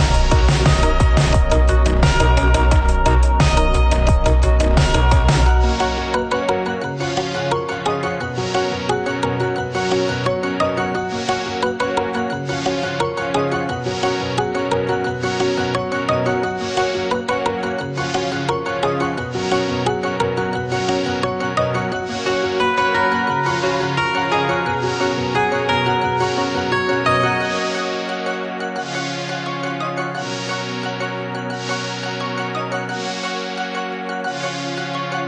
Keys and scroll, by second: 7.2 ctrl+=, 8.4 ctrl+=, 31.9 ctrl+-, 34.0 ctrl+0.